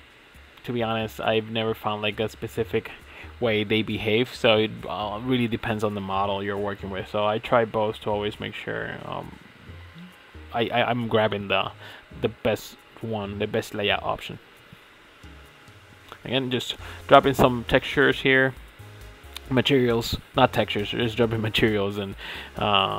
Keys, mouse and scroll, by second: 0.1 click, 1.0 click, 2.8 middle click, 3.4 middle click, 3.5 click, 4.5 click, 5.1 click, 5.2 middle click, 5.4 middle click, 5.7 middle click, 6.6 middle click, 6.7 click, 7.9 click, 8.2 middle click, 8.7 middle click, 9.0 middle click, 9.2 middle click, 9.6 click, 9.8 middle click, 10.3 click, 10.5 middle click, 10.7 middle click, 11.0 middle click, 11.4 click, 11.7 middle click, 11.9 middle click, 12.9 click, 13.8 middle click, 14.4 middle click, 14.6 middle click, 15.1 middle click, 15.6 click, 15.9 middle click, 16.0 click, 16.8 middle click, 17.0 middle click, 17.2 click, 17.3 middle click, 17.6 Left, 17.6 middle click, 17.9 drag, 18.0 shift+middle click, 18.0 scroll down 4, 18.1 middle click, 18.5 click, 18.5 middle click, 18.7 scroll up 6, 18.8 middle click, 18.9 scroll down 1, 19.1 click, 19.3-19.6 middle drag, 19.7 click, 20.0 click, 20.1 click, 20.3 middle click, 20.7 click, 20.8 shift+middle click, 21.2-21.6 scroll down 4, 21.2 shift+middle click, 21.6 scroll up 1, 21.6 shift+middle click, 21.8 click, 22.0 click, 22.0-22.4 middle drag, 22.4 click, 22.5 click, 22.6 middle click.